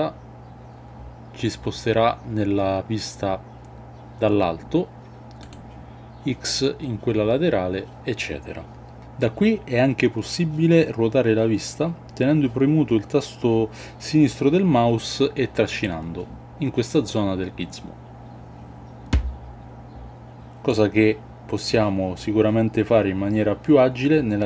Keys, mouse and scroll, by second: 15.8-20.6 drag.